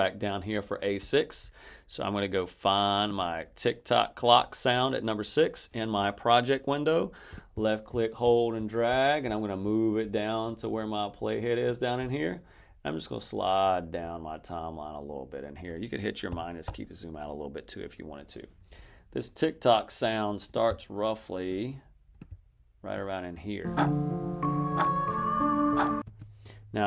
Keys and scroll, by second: 16.2 -, 23.5 space, 25.9 space.